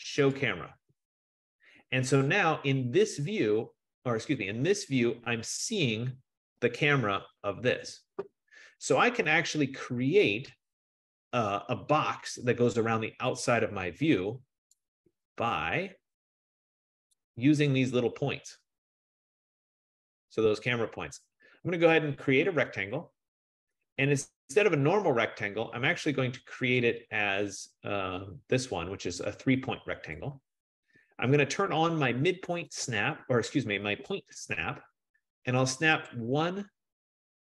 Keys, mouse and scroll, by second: 0.5 click, 4.2-6.2 drag, 13.3 F15, 17.5 right click, 17.9-18.5 scroll, 19.0-20.2 scroll, 22.2-23.0 scroll, 23.2 click, 30.3 click, 33.0 click, 36.2 click.